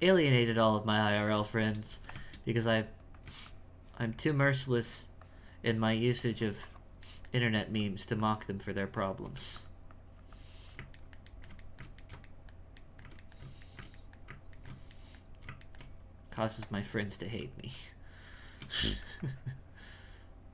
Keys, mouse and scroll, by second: 1.4 shift+middle click, 2.7-7.1 drag, 7.1 shift+middle click, 7.8-9.3 shift+drag, 9.9-11.0 drag, 11.0-16.3 ctrl+middle drag, 16.3 f, 17.2 f, 17.7-20.5 drag.